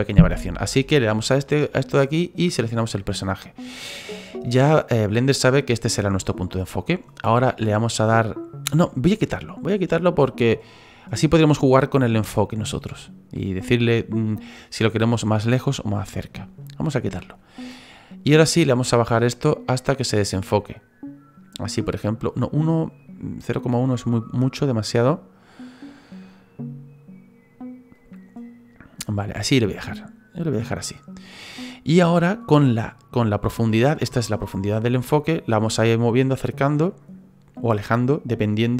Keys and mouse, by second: 1.2 click, 2.8 click, 16.6 click, 18.4 click, 23.0 click, 24.3 click, 25.0 click, 25.6 click, 25.8 click, 26.0 click, 26.3 click, 27.9 click, 28.1 click, 28.9 click, 34.8 click.